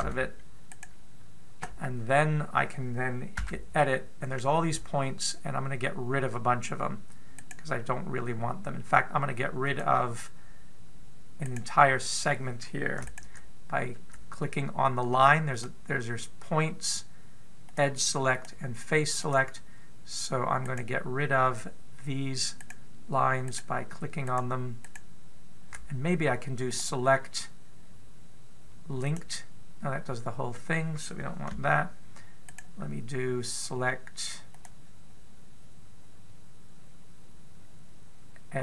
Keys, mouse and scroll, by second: 0.9 g, 4.2 Tab, 8.2 right click, 10.4 click, 12.2 right click, 13.8 shift+right click, 16.3 click, 18.5 click, 19.1 click, 20.0 click, 21.4 right click, 23.4 shift+right click, 24.2 right click, 25.6 shift+right click, 27.5 click, 32.3 a, 33.3 right click, 35.3 click.